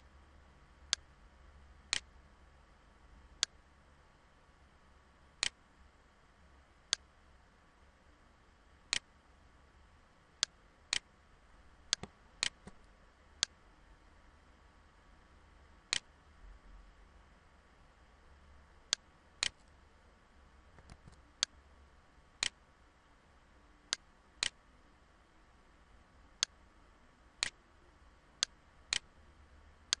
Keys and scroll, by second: 0.4 ctrl+z, 20.4 ctrl+z, 23.9 ctrl+z.